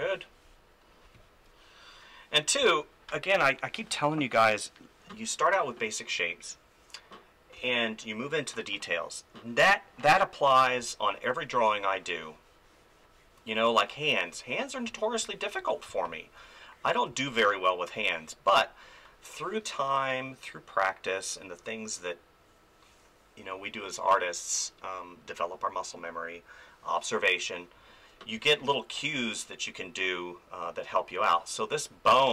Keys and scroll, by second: 2.6 space, 7.6 ctrl+s, 10.8 space, 15.9 space, 28.4 space.